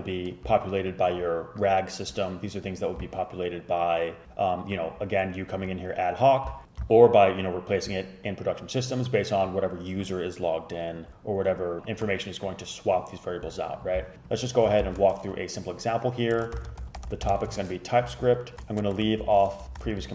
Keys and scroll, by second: 14.9 shift+super+Left, 16.4-19.3 typing, 19.6 shift+Left, 19.8 shift+Left, 20.0 super+c.